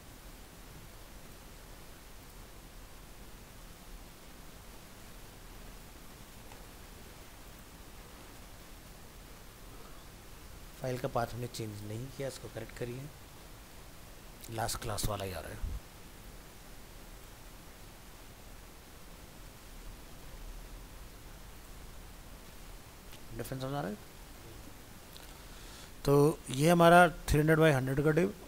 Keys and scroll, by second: 0.9 ctrl+s, 12.7 alt+f, 13.0 alt+移, 13.7 ctrl+c, 17.4 ctrl+v, 18.6 alt+Tab.